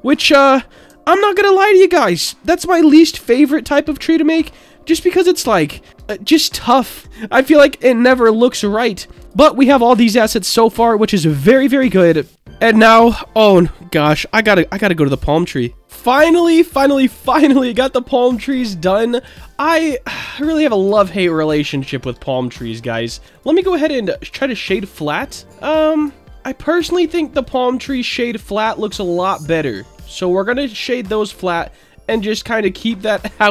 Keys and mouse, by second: 0.3-0.7 middle drag, 1.0 alt+middle drag, 2.0 r, 2.5 KP_1, 2.8 KP_8, 3.1 KP_0, 3.2 Return, 4.2 alt+middle drag, 5.2-5.9 drag, 6.7 click, 8.0 click, 9.2 click, 11.0-12.4 middle drag, 17.8-18.4 middle drag, 19.4 shift+middle drag, 20.2-20.7 middle drag, 21.0 shift+middle drag, 22.0 Tab, 23.1 Tab, 23.5-24.3 right drag, 25.4 middle click, 27.4 click, 27.9-29.0 right drag, 29.6 click, 33.4 middle click.